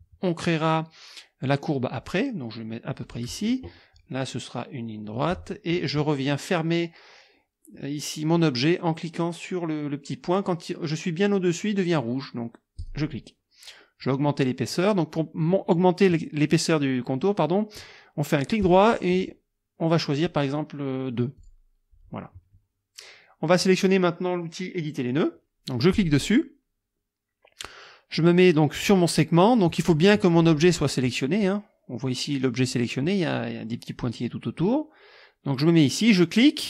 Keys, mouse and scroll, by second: 3.0 click, 5.1 click, 7.7-8.5 scroll up 2, 12.8 click, 18.6 right click, 21.4 click, 25.9 click.